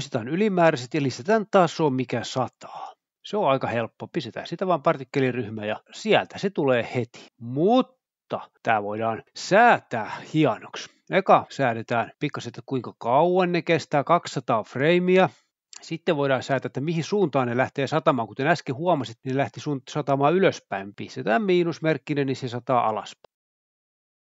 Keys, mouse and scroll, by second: 0.0-0.5 typing, 0.0 click, 1.2 click, 2.5 z, 3.3 click, 4.8-5.3 drag, 5.4 click, 6.4-8.5 drag, 9.7-10.4 scroll down 1, 13.0 click, 13.6 typing, 13.7 Return, 14.3 click, 14.7 typing, 15.3 Return, 16.4-17.1 scroll down 1, 18.2 click, 18.6-18.9 scroll down 1, 19.6 click, 20.1-21.8 typing, 21.0 Return.